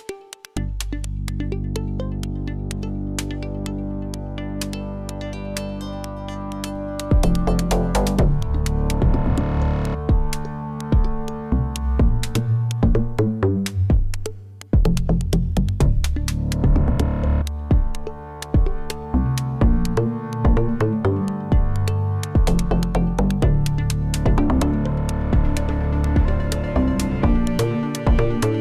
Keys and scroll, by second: 9.5 ctrl+j, 22.2 1, 25.2 shift+d, 26.2 z.